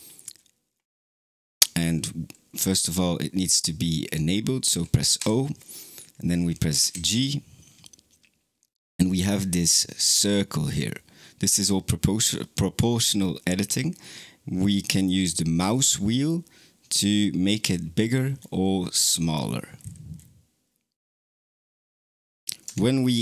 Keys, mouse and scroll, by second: 5.0 o, 22.5 Tab.